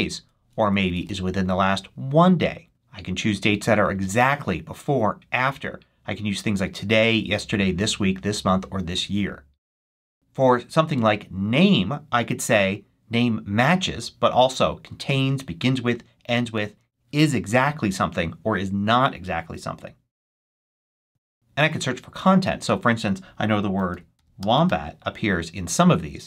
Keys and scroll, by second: 0.0-0.9 typing, 23.5-25.1 typing.